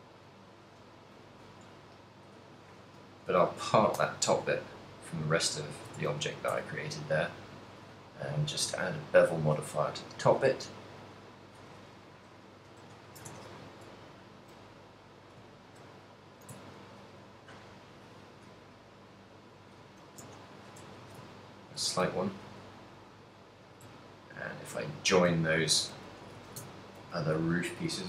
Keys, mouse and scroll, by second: 0.7 x, 1.9 shift+middle click, 3.3 l, 4.2 p, 5.9 Tab, 6.2 z, 6.7 a, 6.8 right click, 7.2 middle click, 9.2 click, 12.7 click, 14.2 middle click, 14.9 middle click, 15.7 ctrl+middle click, 16.1 ctrl+middle click, 16.8 ctrl+middle click, 18.0 middle click, 19.1 click, 19.2 click, 21.2 a, 21.4 ctrl+middle click, 22.1 a, 22.4 middle click, 22.7 a, 23.2 right click, 24.4 shift+right click, 25.0 shift+right click, 25.9 ctrl+j, 26.5-28.0 typing, 26.9 ctrl+middle click, 27.5 middle click.